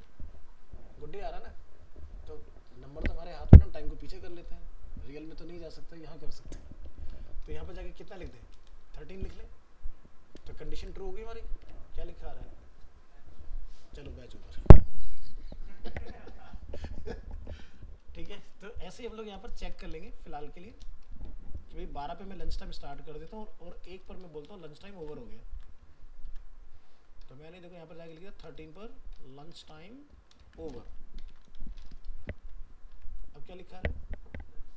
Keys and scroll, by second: 6.4 alt+Tab, 10.8 ctrl+s, 11.7 alt+Tab, 15.9 alt+Tab, 25.0 ctrl+c, 26.3 ctrl+v, 30.4 ctrl+shift+Left, 32.4 ctrl+s, 33.0 alt+Tab.